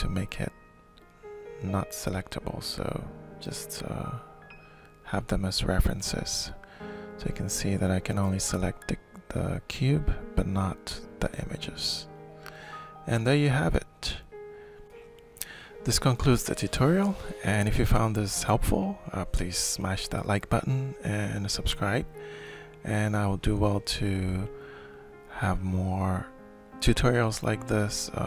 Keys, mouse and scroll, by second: 1.3 ctrl+shift+click, 1.6 ctrl+shift+click, 3.1 click, 3.3 click, 3.8 click, 4.2 click, 5.0 click, 5.2 click, 5.9 click, 6.5 click, 9.5 click, 10.7 click, 11.3 alt+shift+click, 13.3 click, 14.2 click, 14.7-15.7 alt+shift+drag, 16.1 alt+shift+click, 17.1 alt+shift+click, 18.2-21.1 alt+shift+drag, 22.2-26.9 shift+drag, 27.7 click.